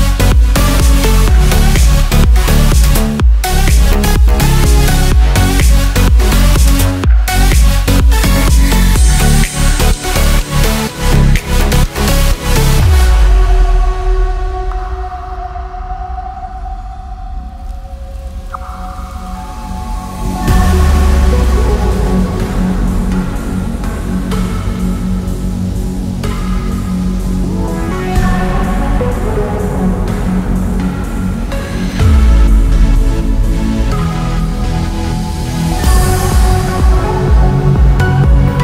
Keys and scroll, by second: 17.8 ctrl+z, 28.2 ctrl+j, 29.8 ctrl+j.